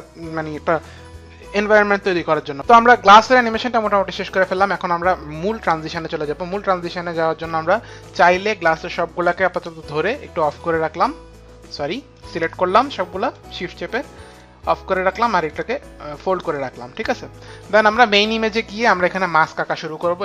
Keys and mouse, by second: 3.3 click, 5.7 click, 8.4 click, 9.4 shift+click, 10.5 click, 12.4 click, 13.3 shift+click, 14.3 click, 15.4 click.